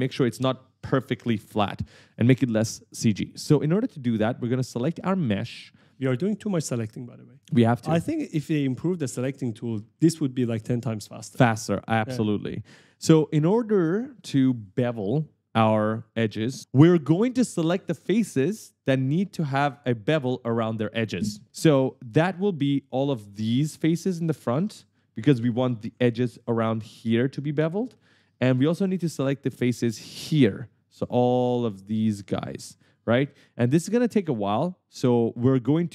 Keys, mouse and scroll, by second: 3.6 click, 4.0 right click, 8.7 click, 9.9 right click, 10.6 w, 13.8 right click, 16.2 right click, 21.9 right click, 22.0-22.8 typing, 24.7-26.4 typing, 28.0 right click, 32.8 right click, 33.2-34.0 typing, 33.3 right click, 35.4-35.9 typing.